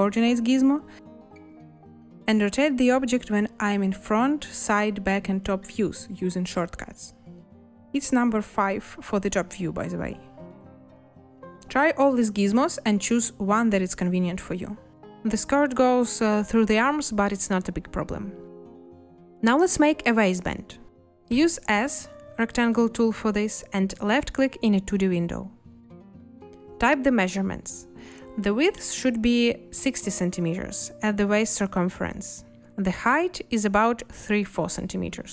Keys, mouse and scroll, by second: 4.0 2, 5.0 4, 8.0 5, 10.8 2, 21.9 s, 29.1 6, 29.6 0, 34.3 4.